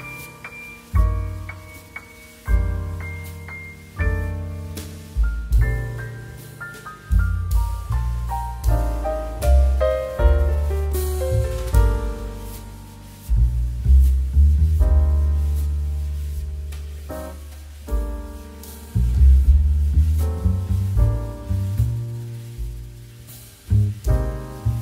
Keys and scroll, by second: 4.6 x, 10.4 c, 10.7 x, 11.5 z, 14.1 z, 15.9 space, 21.8 space.